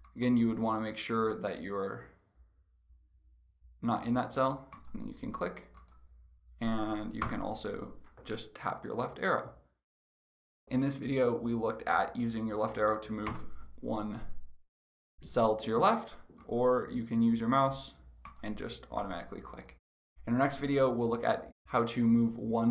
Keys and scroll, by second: 6.9 Left, 13.4 Left.